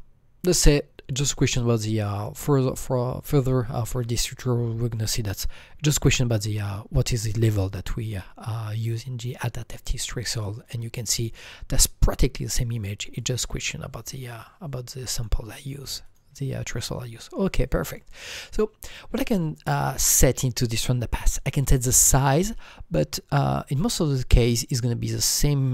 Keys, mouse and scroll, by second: 10.6-16.0 drag, 10.6 scroll down 1, 17.3-21.5 drag.